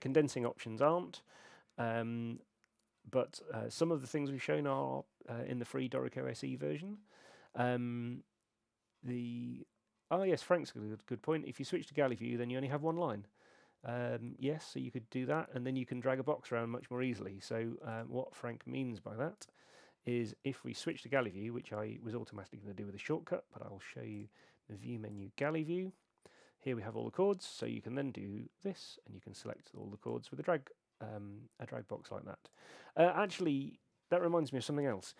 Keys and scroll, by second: 21.0 super+8.